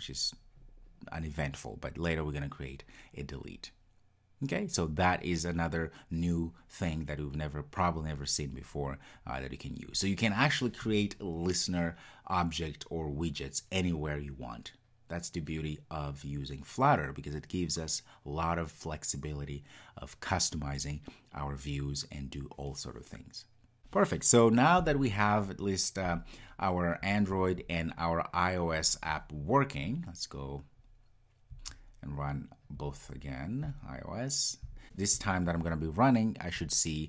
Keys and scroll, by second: 34.7 ctrl+r.